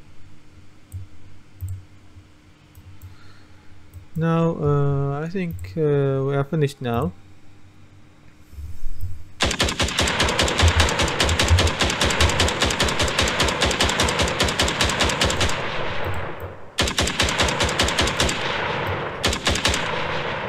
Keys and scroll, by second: 10.4-12.3 typing.